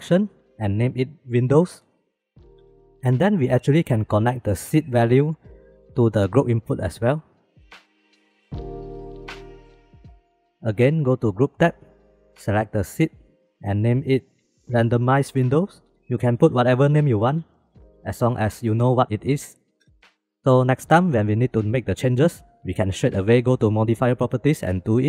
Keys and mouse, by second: 0.2 click, 1.0-2.9 drag, 3.8 click, 4.7-7.3 drag, 7.7 middle click, 8.7-10.3 middle drag, 14.5 shift+middle click.